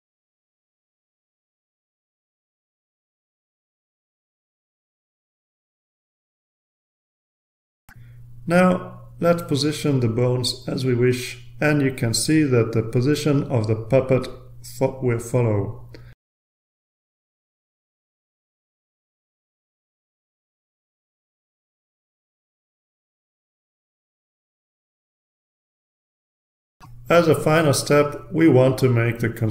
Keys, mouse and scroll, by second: 0.0 ctrl+click, 0.2 ctrl+click, 0.4 ctrl+a, 0.6 ctrl+click, 1.0 middle drag, 1.4 ctrl+click, 1.8 ctrl+s, 2.3 click, 2.6 ctrl+r, 3.4 drag, 3.7 click, 4.2 click, 4.7-5.2 drag, 5.4 ctrl+click, 5.6 ctrl+click, 6.2 right click, 6.8 click, 7.5 click, 7.8 ctrl+r, 9.1-10.2 drag, 11.5-12.6 drag, 14.1-15.4 drag, 16.1-17.1 drag, 18.2-19.2 drag, 20.1-20.8 drag, 21.7 click, 23.1 ctrl+z, 23.8 ctrl+z, 25.4 ctrl+z, 26.2 ctrl+z, 27.1 ctrl+z.